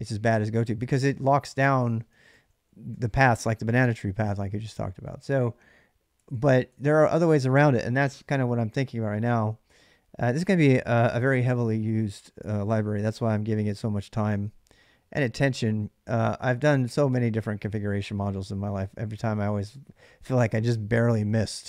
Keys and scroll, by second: 0.6-2.7 typing, 4.6 ctrl+[, 4.7 j, 4.9 j, 6.5-11.3 typing, 12.5 k, 12.7 k, 13.0 k, 18.1-19.4 typing.